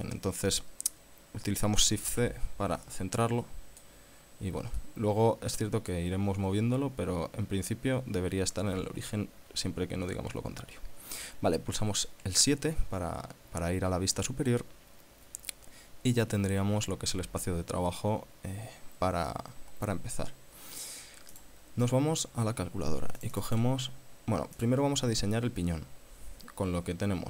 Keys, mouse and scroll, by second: 2.3 shift+c, 3.5 middle click, 4.4-4.7 scroll up 1, 5.0-6.3 middle drag, 11.9 KP_7, 13.3 scroll down 1, 21.6 click, 23.4 click, 24.7 click.